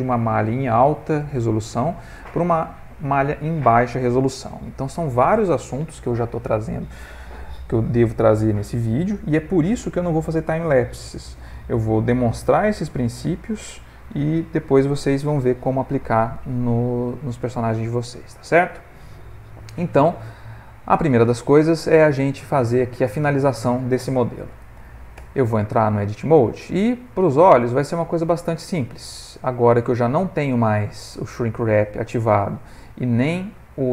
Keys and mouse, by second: 18.1 middle click, 19.6 middle click, 21.3 middle click, 22.4 middle click, 22.6 middle click, 24.2 middle click, 25.6 Tab, 26.3 middle click, 26.5 middle click, 27.7 alt+click, 28.3 middle click.